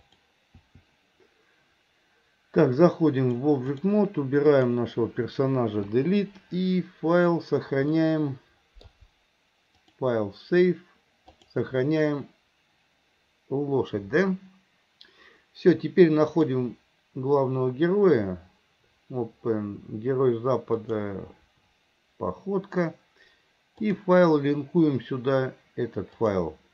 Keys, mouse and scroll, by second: 0.2 click, 0.7 i, 3.2 click, 4.6 click, 6.0 Delete, 8.1-8.9 middle drag, 9.9-14.5 drag, 16.4-21.8 drag.